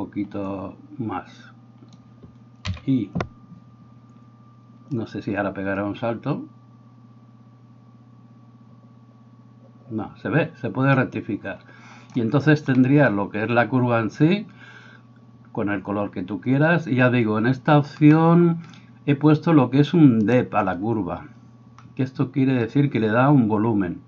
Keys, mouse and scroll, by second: 12.8-24.0 middle drag, 20.3-24.0 right drag.